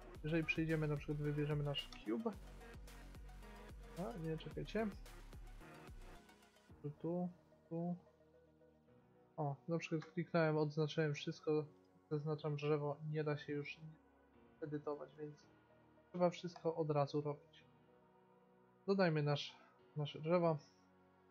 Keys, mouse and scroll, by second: 8.5 a, 9.2 right click, 10.1 a, 11.3-13.1 right drag, 14.1 middle click, 15.4 x, 18.1 x, 18.6 shift+a.